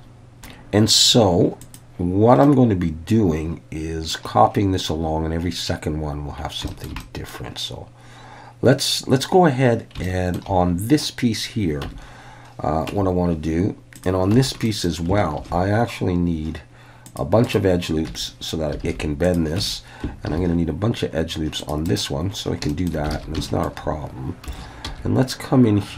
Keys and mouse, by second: 1.6 click, 2.4 middle click, 2.6 click, 3.5 middle click, 6.7 shift+middle click, 7.0 middle click, 10.0 shift+middle click, 11.9 Tab, 12.9 Tab, 14.3 Tab, 14.6 middle click, 15.4 ctrl+r, 17.4 right click, 18.1 Tab, 18.8 alt+a, 19.3 click, 19.6 Tab, 20.2 ctrl+r, 22.7 shift+click, 23.2 alt+a, 23.4 shift+middle click, 24.5 3, 24.8 c.